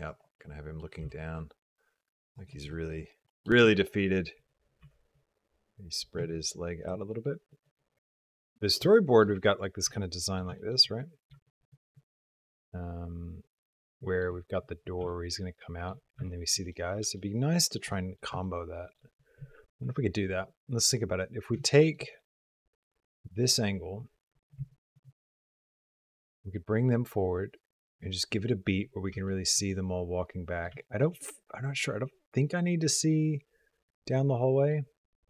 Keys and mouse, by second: 0.3 middle click, 2.0 g, 2.5 middle click, 3.0 middle click, 3.5 shift+click, 4.2 click, 4.7 g, 7.0 click, 7.3 middle click, 7.9 shift+middle click, 8.0 ctrl+click, 8.4 click, 8.8 shift+click, 9.2 middle click, 9.7 ctrl+click, 10.4 shift+click, 10.7 click, 11.3 shift+click, 11.8-14.1 shift+drag, 14.9 shift+click, 16.1 shift+click, 16.6 click, 17.0 shift+click, 17.7 click, 18.3 shift+click, 21.5 shift+click, 22.0-24.4 drag, 24.6 shift+click, 29.2 shift+click, 29.6 click, 30.7 shift+click, 31.1-34.6 middle drag.